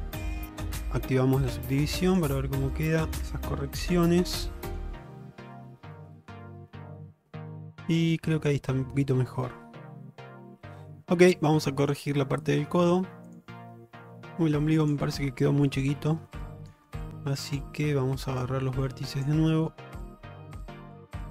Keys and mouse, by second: 0.9 click, 1.6 Tab, 2.2 click, 2.4-2.8 middle drag, 3.0 shift+middle click, 3.9 q, 4.7 click, 5.1-10.9 middle drag, 11.2 shift+middle drag, 11.5-11.9 middle drag, 12.5 shift+middle drag, 13.9 middle click, 15.3 Tab, 16.4 alt+middle click, 17.2 alt+z, 18.6-19.4 drag, 21.0 shift+click.